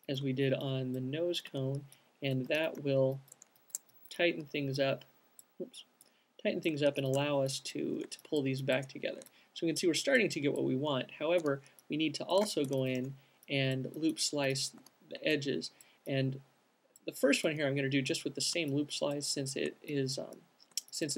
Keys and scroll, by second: 0.2 c, 1.8 q, 2.3 alt+shift+c, 4.6 alt+shift+q, 6.6 alt+c, 11.7 alt+q, 12.8-14.1 typing.